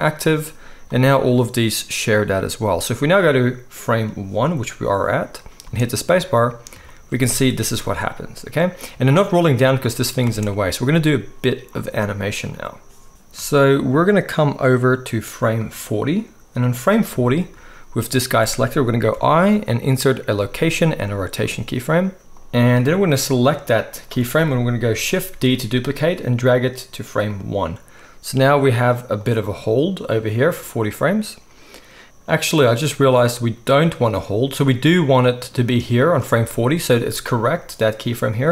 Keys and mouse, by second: 0.8 click, 3.9-9.6 drag, 5.6 space, 7.5 alt+a, 9.6-15.6 middle drag, 10.3 space, 15.6-27.3 drag, 19.1 i, 25.3 shift+d, 27.3-29.2 middle drag, 29.2-38.5 drag.